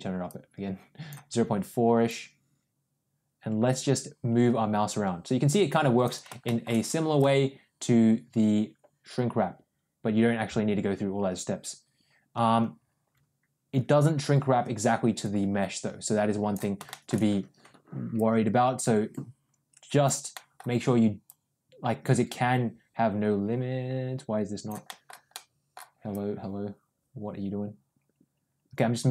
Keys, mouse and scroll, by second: 0.2 click, 1.9-5.9 drag, 6.3 shift+middle click, 7.0-16.4 drag, 16.8 shift+middle click, 18.0-19.9 drag, 20.2 middle click, 21.1-24.6 drag, 24.7 middle click, 25.2 middle click, 26.0-29.1 drag.